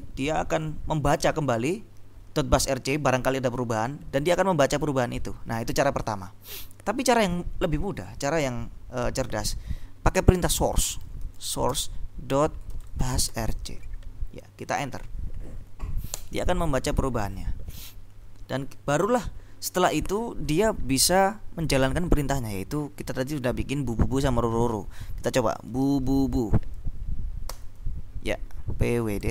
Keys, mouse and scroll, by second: 10.5-14.1 typing, 16.2 Return, 25.9 b, 26.2 u, 27.6 Return, 28.7-29.3 typing.